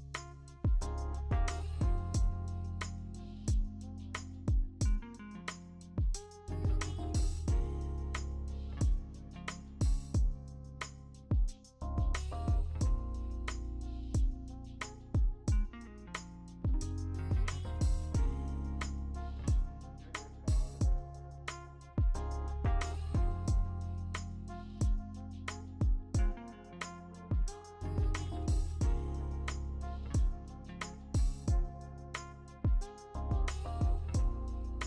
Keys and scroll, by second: 2.2 ctrl+d, 20.6 Return, 23.2 ctrl+alt+shift+e, 24.1 ctrl+z, 24.9 ctrl+alt+shift+e, 25.5 ctrl+z, 25.5 ctrl+alt+shift+e, 26.5 v, 28.3 ctrl+alt+shift+e.